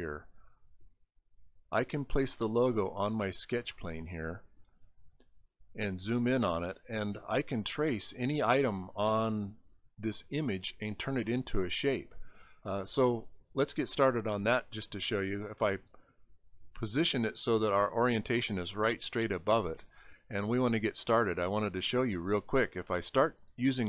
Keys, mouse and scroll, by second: 1.9 click, 5.2 scroll up 1, 6.7 middle click, 15.0 click, 17.8 middle click, 18.1 middle click, 21.1 click.